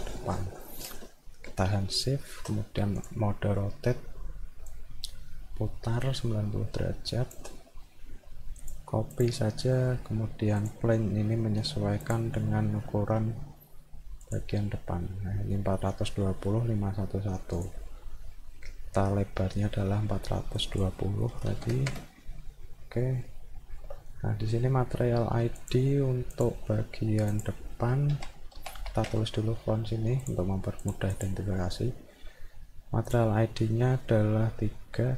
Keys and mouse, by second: 3.0 click, 4.7-7.4 shift+drag, 8.6 click, 9.1 click, 10.6 click, 12.1 click, 14.2 click, 17.6 click, 20.6 click, 23.2 alt+middle click, 25.6 click, 26.3 click, 27.3 click, 30.2 click, 30.8 click, 31.1 click.